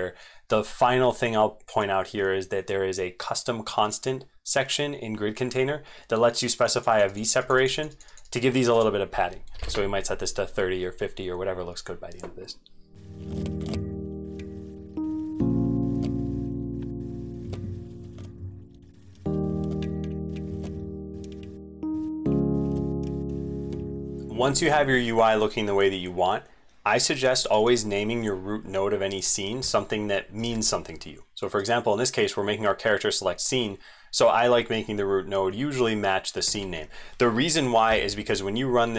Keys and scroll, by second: 13.0 ctrl+v, 13.0 ctrl+x, 13.0 super+2, 13.3 ctrl+x, 13.5 ctrl+a, 13.6 ctrl+a, 18.2 ctrl+shift+End, 24.2 ctrl+z, 24.3 ctrl+a, 30.4 ctrl+v, 36.5 ctrl+s.